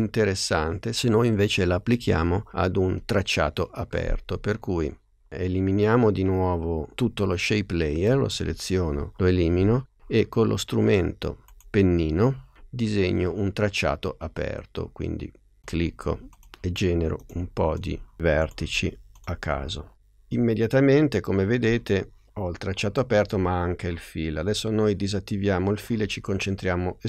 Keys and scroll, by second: 9.0 BackSpace.